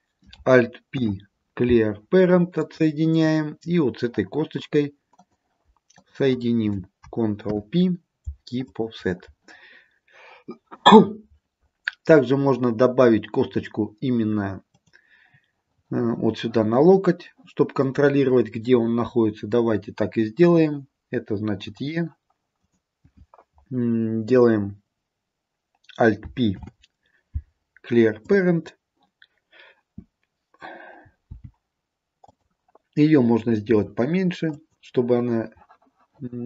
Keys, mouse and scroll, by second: 1.0 alt+p, 3.8-4.4 scroll up 2, 4.4-5.2 scroll down 1, 5.2 click, 6.0 shift+click, 7.6 ctrl+p, 14.8 click, 20.5 e, 22.7 click, 26.6 alt+p, 31.4 g, 33.8 s.